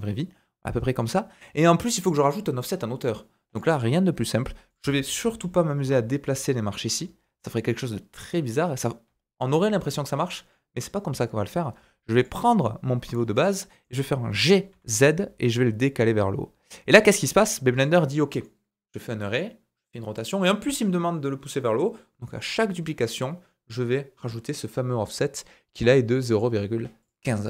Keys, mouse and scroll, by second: 3.5 click, 3.6-4.7 middle drag, 4.7 click, 4.7-12.2 middle drag, 5.8 g, 12.2 click, 12.2-27.0 middle drag, 14.3 g, 27.0-27.4 drag.